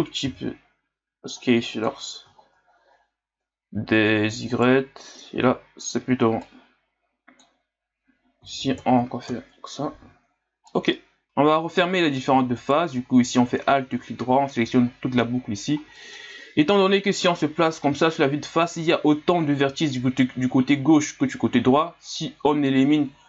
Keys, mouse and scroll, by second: 2.4-4.5 scroll up 2, 4.5 right click, 6.0 b, 8.4 s, 10.0 z, 10.7-12.5 middle drag, 12.5 alt+right click, 16.0-17.2 middle drag, 17.2 KP_1, 18.2 scroll down 4, 18.9-22.0 scroll up 2.